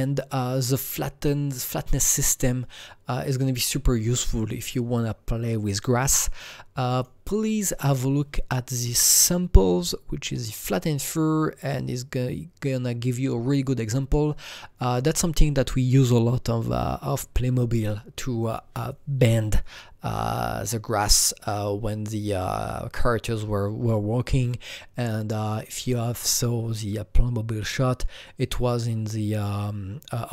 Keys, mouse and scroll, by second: 2.1-6.9 drag, 6.9-9.5 drag, 14.8 click.